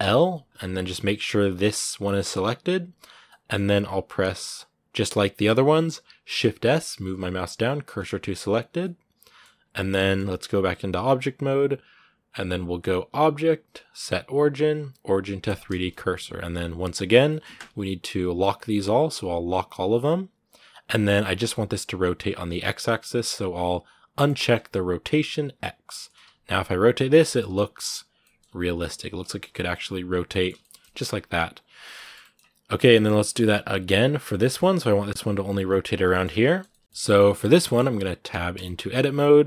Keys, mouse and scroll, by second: 0.2 scroll down 2, 0.7 g, 3.1-7.8 middle drag, 7.8 shift+s, 8.6-10.8 middle drag, 10.8 Tab, 15.3 click, 15.5 scroll down 2, 15.7-18.2 middle drag, 18.2-20.7 drag, 20.7 scroll down 1, 20.8-24.1 middle drag, 24.1-25.7 drag, 25.7 scroll down 2, 26.0 r, 27.0 middle click, 27.2 r, 28.0 middle click, 28.2 scroll up 2, 28.4 r, 29.0 middle click, 29.2 r, 30.1 middle click, 30.8 scroll up 2, 30.9 r, 31.5 scroll down 2, 31.6 shift+middle click, 32.0-32.6 scroll up 1, 32.6 shift+middle click, 33.0 a, 33.1 middle click, 33.3-34.0 scroll up 2, 34.0 right click, 34.2 middle click, 34.5 r, 35.9 shift+middle click, 36.0 scroll up 2, 36.2 shift+middle click, 37.2 scroll up 1, 37.4 middle click, 38.1 Tab, 38.4 shift+middle click, 38.6-39.1 scroll up 2, 39.1-39.4 middle drag.